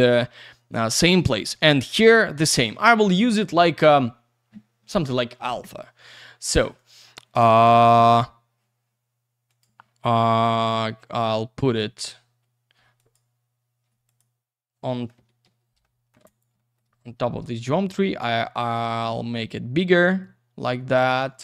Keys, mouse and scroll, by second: 6.7 click, 9.5 click, 10.5 middle click, 10.7 F3, 11.6 middle click, 11.8 F3, 12.9 click, 14.0 click, 14.9 middle click, 15.8 alt+middle click, 16.2 alt+z, 16.2 click, 16.7 double middle click, 16.8 F3, 17.2 scroll down 1, 17.9 click, 18.9 scroll down 1, 19.1 alt+middle click, 19.4 w, 20.2 click, 21.3 alt+middle click.